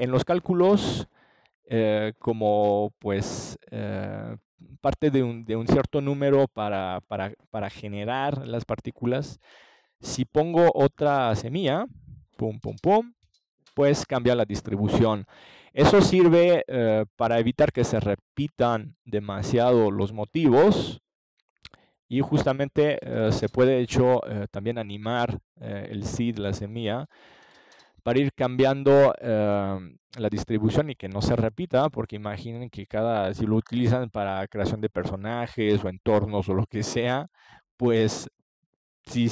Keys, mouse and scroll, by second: 4.1-5.5 drag, 4.9 KP_0, 6.7-9.6 drag, 27.3 ctrl+s, 30.6-32.3 middle drag, 31.5 KP_0, 34.0-37.5 middle drag, 38.7 click.